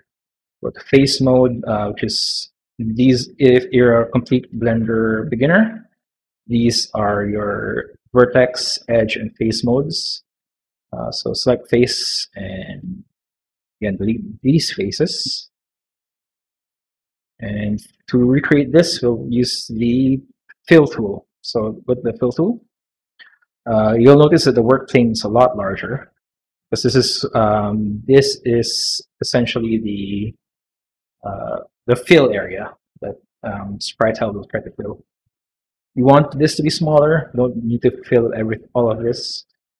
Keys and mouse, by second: 0.4 middle click, 0.8 3, 1.4 middle click, 2.7 click, 3.8 click, 4.2 click, 5.2 click, 5.8 click, 7.0 click, 7.6 click, 8.7 click, 9.1 click, 13.5 x, 21.8 click, 23.9 middle click, 25.1 middle click, 26.1 s.